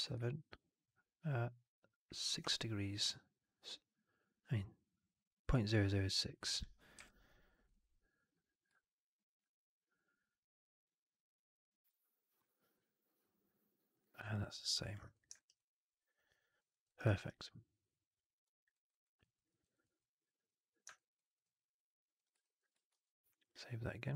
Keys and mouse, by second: 6.9 q, 14.2-14.8 alt+drag, 15.0 click, 15.3 alt+right drag, 15.5-16.5 alt+drag, 16.6 alt+middle drag, 16.8 alt+right click, 17.0 alt+right drag, 17.2-18.6 alt+drag, 18.6 alt+right drag, 18.8 alt+right drag, 19.1 alt+drag, 19.4 alt+middle drag, 19.5 alt+right click, 19.7 alt+click, 22.1 click, 22.3 alt+click, 22.8 ctrl+s.